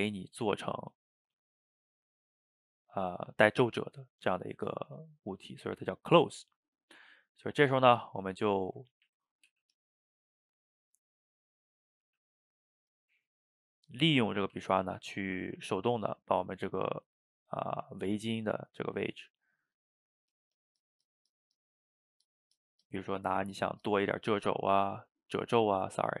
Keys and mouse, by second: 1.9 middle click, 2.5-5.9 drag, 5.9-7.1 middle drag, 7.1 click, 8.0 middle click, 8.9 ctrl+z, 9.1 ctrl+z, 9.5 f, 10.0 middle click, 10.4-12.1 drag, 12.1 f, 12.9-14.6 drag, 14.6 f, 15.1 middle click, 15.4-17.3 drag, 17.3 middle click, 17.9 click, 18.3 middle click, 18.9-24.3 drag, 24.3-25.5 middle drag, 25.5-26.2 drag.